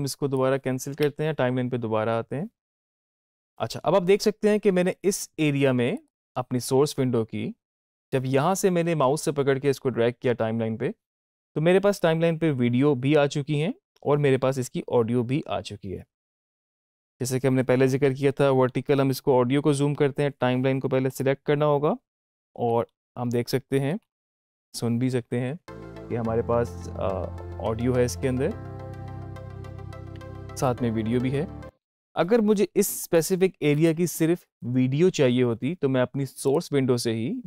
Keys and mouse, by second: 5.8 click, 18.6 alt+=, 21.0 click, 22.2 alt+=, 25.4 space, 31.7 space, 32.9 click, 36.3 click.